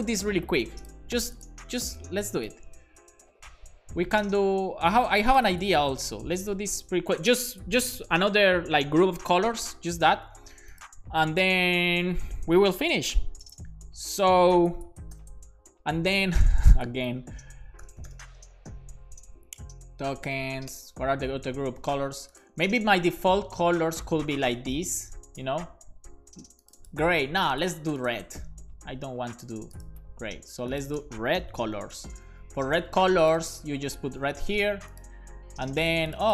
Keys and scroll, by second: 4.4 super+c, 5.9 Return, 6.1 Return, 6.3 super+v, 6.4 super+s, 15.3 shift+super+p, 16.6 BackSpace, 18.1 typing, 20.1 typing, 31.5-32.5 typing, 33.9-35.0 typing, 35.3 super+s.